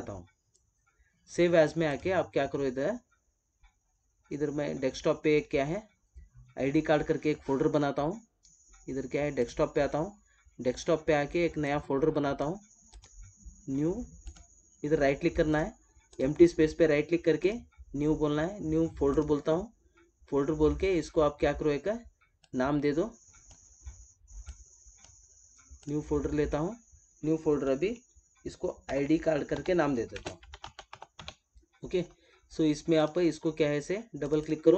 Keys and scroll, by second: 30.1 space.